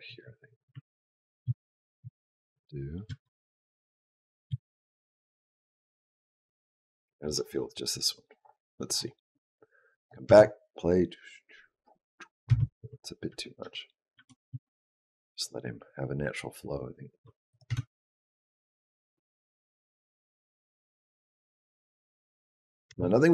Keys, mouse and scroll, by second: 1.4 ctrl+z, 1.9 ctrl+z, 3.0 ctrl+z, 4.4 ctrl+z, 10.0 click, 10.2 space, 12.4 space, 13.2 ctrl+z, 13.5 ctrl+z, 14.1 ctrl+z, 14.4 ctrl+z, 17.4 click, 17.6 space, 20.4 click, 22.8 space.